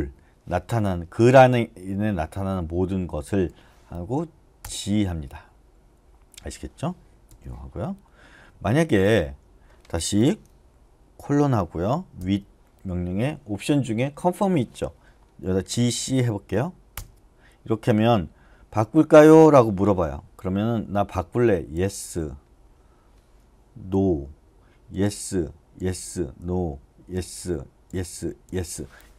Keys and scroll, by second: 3.2 g, 4.6 Return, 7.3 u, 11.2 shift+;, 15.5 shift+c, 16.9 Return, 21.7 y, 23.9-27.1 typing.